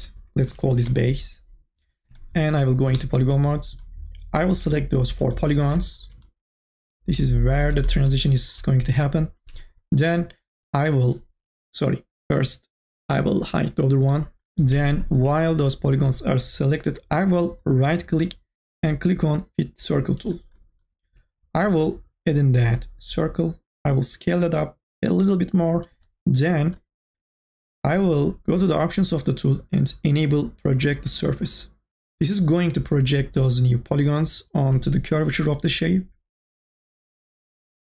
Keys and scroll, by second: 0.0-1.6 typing.